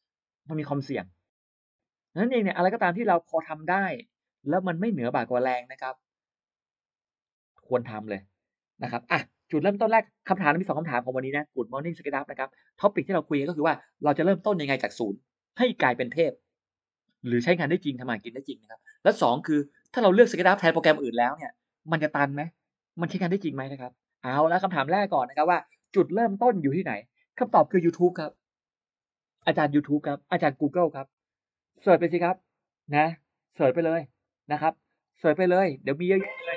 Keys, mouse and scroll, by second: 26.0 click, 26.9 click, 28.2 y, 29.3 Return, 32.9 click, 34.0 click.